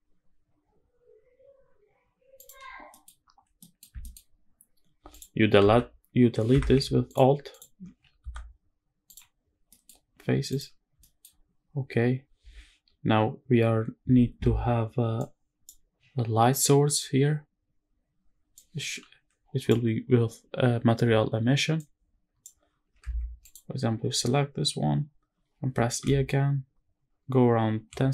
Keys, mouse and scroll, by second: 2.1 shift+click, 2.6 middle click, 3.3 middle click, 3.7 shift+middle click, 3.9-4.4 scroll up 2, 4.4 scroll down 1, 4.8 alt+click, 5.3 x, 6.8 alt+click, 7.2 alt+click, 7.9 x, 9.3 scroll down 2, 9.4 middle click, 9.7 scroll up 2, 10.2 click, 10.7 shift+middle click, 11.1-11.4 scroll up 1, 11.4-12.3 scroll down 1, 15.4 click, 15.4 shift+middle click, 15.4-17.6 scroll down 1, 23.1 click.